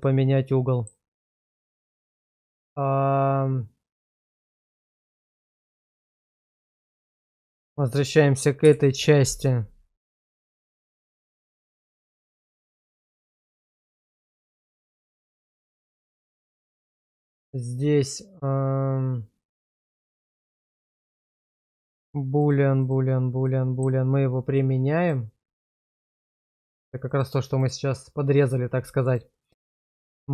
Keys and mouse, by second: 0.0-0.9 middle drag, 2.5 click, 4.8 middle drag, 6.3 middle drag, 7.1 shift+middle drag, 11.4-13.2 middle drag, 13.6 shift+middle drag, 14.7-16.2 middle drag, 16.4 shift+middle drag, 16.8-17.3 middle drag, 20.1 middle click, 21.8 click, 22.4 click, 22.8 click, 23.4-23.8 middle drag, 25.0 click, 25.6-26.7 drag, 27.1 click, 27.5 click, 28.4-29.1 drag.